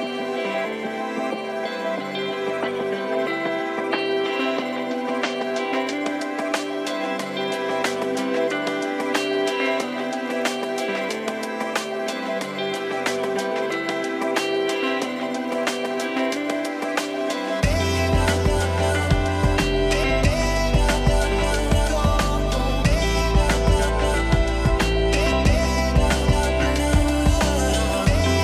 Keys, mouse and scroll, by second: 0.3 click, 0.9 click, 1.3-2.4 middle drag, 2.2 click, 3.1-4.4 middle drag, 4.2 click, 4.8 middle click, 5.4 scroll up 1, 5.5 middle click, 6.2 click, 7.6 scroll up 1, 7.6-9.0 middle drag, 9.1-10.6 middle drag, 10.8 click, 10.9 middle click, 11.4 f, 11.4-12.8 drag, 11.9 middle click, 12.5-15.0 middle drag, 13.0-14.3 drag, 15.1-18.7 middle drag, 17.0 ctrl+s, 18.9 middle click, 19.7 scroll up 1, 19.8-20.8 middle drag, 21.0 click, 21.2 f, 21.4-23.4 drag, 21.9 f, 23.3 middle click, 24.2 f, 24.4 click, 24.8 middle click, 25.5 middle click, 25.9 click, 26.6 ctrl+s, 27.4 middle click.